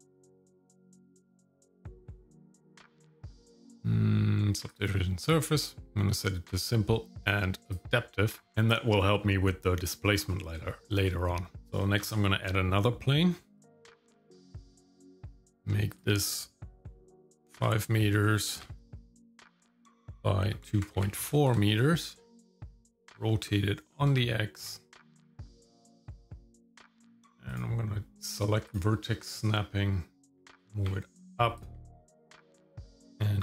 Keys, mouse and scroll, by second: 0.5-4.8 drag, 6.1 click, 7.7 click, 9.4-10.6 scroll up 1, 10.6 shift+middle click, 11.6 shift+middle click, 12.0 shift+a, 15.9-18.6 drag, 19.9-21.5 drag, 23.0 r, 25.7 shift+middle click, 27.5-29.0 drag, 29.1 shift+middle click, 30.4 g, 33.1 g.